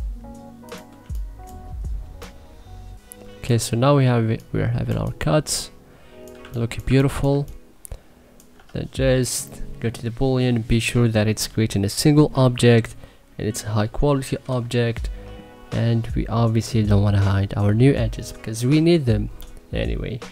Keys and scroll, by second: 0.8 3, 6.6 1, 7.1 3.